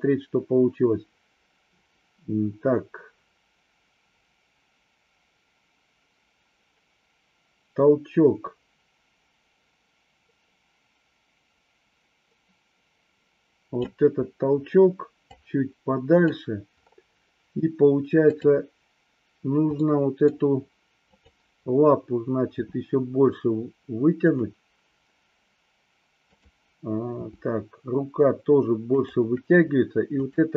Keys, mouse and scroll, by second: 15.4-16.4 drag, 18.4 drag, 19.9 scroll up 1, 20.0 middle click, 21.2 click, 22.7 g, 24.3 click, 26.4 click, 27.3 g, 30.3 click.